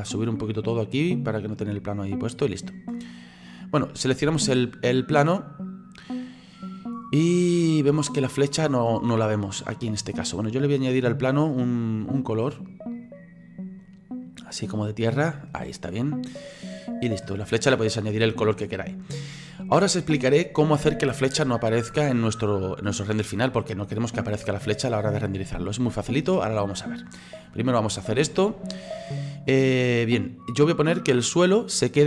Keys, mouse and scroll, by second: 0.1-1.2 drag, 1.2-1.5 scroll up 4, 1.5 middle click, 2.4-3.3 scroll up 3, 3.3 right click, 4.3 ctrl+z, 5.0-10.7 middle drag, 11.1 click, 12.1 click, 12.9 click, 16.4-17.5 middle drag, 17.5-18.5 scroll up 4, 18.5-22.6 middle drag, 22.6 scroll down 2, 29.1 scroll up 3, 30.8 click.